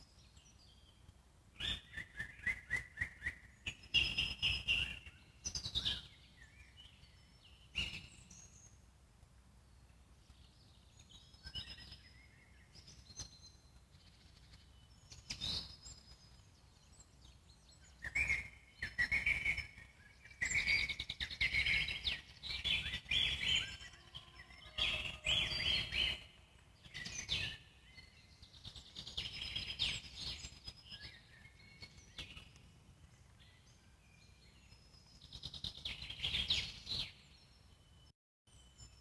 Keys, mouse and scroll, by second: 0.0-1.8 alt+middle drag, 2.0 Tab, 2.4 scroll down 2, 2.7-3.5 alt+middle drag, 3.5 click, 3.7-4.0 scroll down 2, 4.0-5.5 alt+middle drag, 5.5 Tab, 5.8-7.6 scroll up 2, 11.8-13.2 scroll down 1, 13.2 scroll down 3, 13.3 Tab, 14.3-15.5 drag, 15.5 alt+middle click, 15.9 Tab, 16.2-17.9 alt+middle drag, 21.3 alt+middle click, 22.1 click, 22.7 z, 23.0 click, 23.3 z, 23.6-25.3 alt+middle drag, 25.3 x, 26.1-28.0 alt+middle drag, 28.0 click, 28.5 z, 28.7 click, 28.9 z, 30.7-32.4 alt+middle drag, 33.4 click, 34.1 z, 34.5 click, 34.7 z, 36.3-37.3 alt+middle drag, 37.3 z, 37.6 click, 38.1 middle click, 38.5 shift+click.